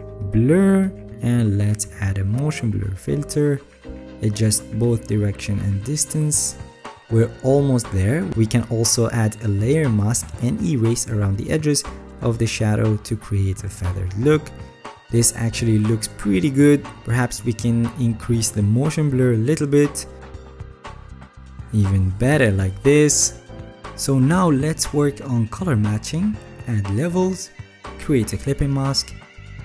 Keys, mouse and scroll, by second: 13.4 alt+right click, 13.8 alt+right click, 16.3 alt+right click, 18.2 alt+scroll.